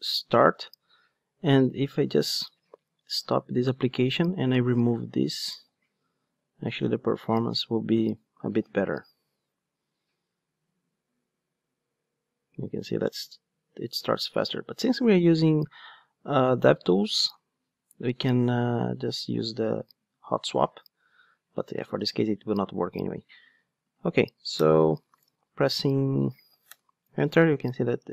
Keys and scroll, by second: 2.8 super+F2, 2.9 super+F2, 8.7 ctrl+d.